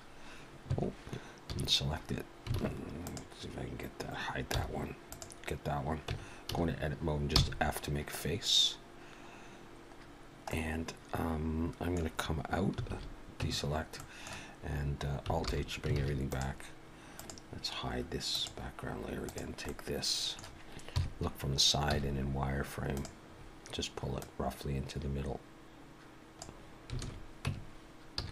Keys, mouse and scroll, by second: 1.5 a, 2.5 alt+a, 3.0 click, 5.1 click, 5.1 h, 6.5 Tab, 6.5 a, 7.2 f, 10.2 scroll down 1, 10.5 middle click, 12.9 alt+a, 13.4 Tab, 13.9 middle click, 15.4 alt+h, 16.0 alt+a, 16.3 click, 17.2 click, 18.3 click, 19.3 click, 19.7 middle click, 20.8 KP_3, 21.9 z, 23.3-23.9 scroll up 1, 23.9-24.2 scroll up 2, 24.2 click, 27.0 alt+a, 27.4 Tab, 28.2 z.